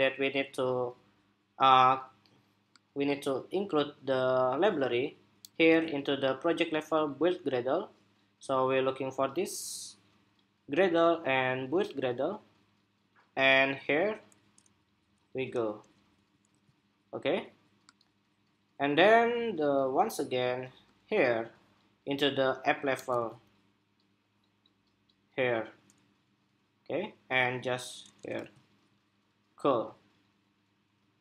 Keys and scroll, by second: 5.2 super+c, 16.2 super+v, 22.7 super+c, 28.1 super+v.